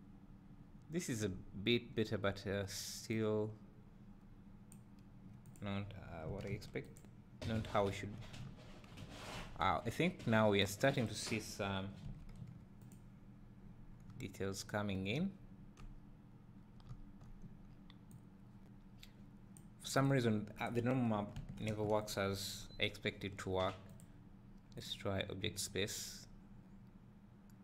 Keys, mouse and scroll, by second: 0.0-7.5 drag, 1.6-3.1 scroll up 2, 8.1 scroll down 2, 8.4 `, 9.5 scroll up 1, 13.2 click, 13.9 scroll down 1, 14.1 `, 15.9-16.6 scroll up 2, 16.6 scroll down 2, 16.9 `, 18.6-20.5 drag, 25.0-27.6 drag.